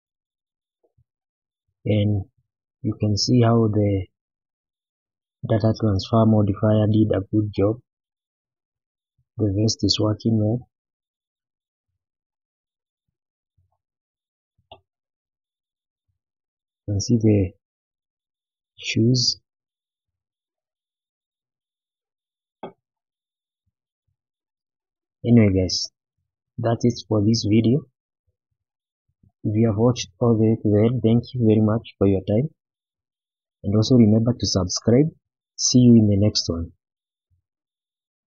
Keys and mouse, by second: 0.9 shift+middle drag, 1.4-1.9 middle drag, 2.2-2.9 middle drag, 3.5-3.9 middle drag, 4.3 shift+middle click, 4.7-5.5 middle drag, 6.2-6.7 middle drag, 7.7-8.1 shift+middle drag, 8.3-9.1 middle drag, 9.6-10.3 middle drag, 11.1 shift+middle drag, 11.7 shift+middle drag, 12.8-13.4 middle drag, 13.9-14.2 middle drag, 14.4-14.7 shift+middle drag, 14.9 click, 15.3-15.9 middle drag, 16.1-16.5 shift+middle drag, 16.7-17.1 middle drag, 17.3-17.7 shift+middle drag, 18.6-19.0 middle drag, 19.7 shift+middle drag, 20.6 click, 21.0-22.0 middle drag, 23.1-24.1 middle drag, 25.0-25.3 middle drag, 26.5 shift+middle click, 28.0 shift+middle drag, 28.9-29.2 middle drag, 35.8 middle click.